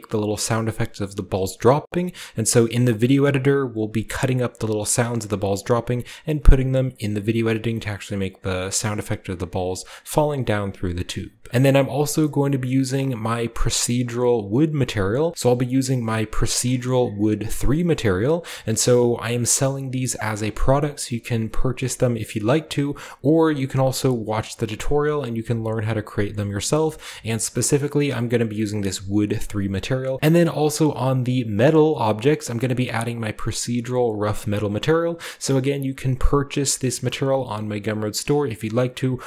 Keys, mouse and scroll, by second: 14.8-16.1 scroll down 2, 16.1 ctrl+scroll down 1, 16.2 ctrl+scroll up 2, 16.6 scroll down 2, 18.6-21.5 scroll up 6, 22.8 click, 23.0 drag, 23.1 middle click, 23.2 drag, 24.0-27.2 drag, 27.2-27.9 scroll up 1, 27.9-30.2 scroll down 1, 30.6-31.9 drag, 32.0 click, 32.2 click, 32.5-35.1 drag, 33.3 middle click, 33.3 scroll down 1, 35.1 drag, 35.3 drag, 35.6-36.8 drag, 36.9-39.2 drag.